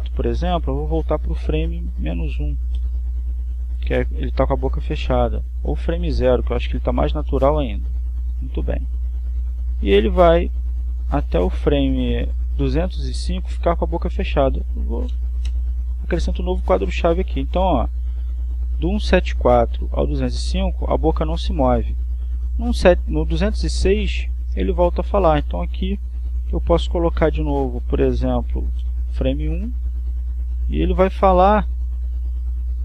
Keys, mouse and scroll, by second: 2.2 click, 3.5 -, 4.0 1, 4.3 Return, 7.3 click, 8.2 0, 10.8-13.7 drag, 15.6 click, 16.6 0, 17.0 Return, 19.0-26.3 drag, 26.7 click, 29.9 1, 30.3 Return, 32.1-32.8 drag.